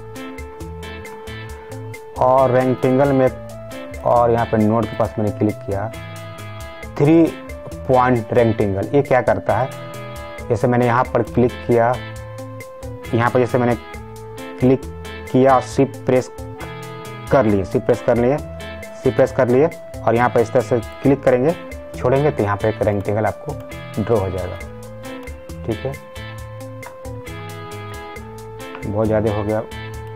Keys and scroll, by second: 27.0 ctrl+z.